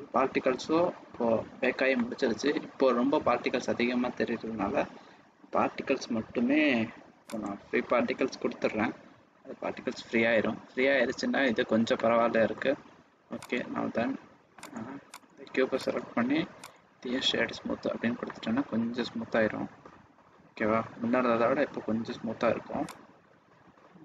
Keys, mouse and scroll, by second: 1.9 middle click, 2.4 scroll up 1, 7.2 click, 11.9 middle click, 13.3 right click, 14.5 click, 15.1 click, 15.9 right click, 18.3 middle click, 23.1 click.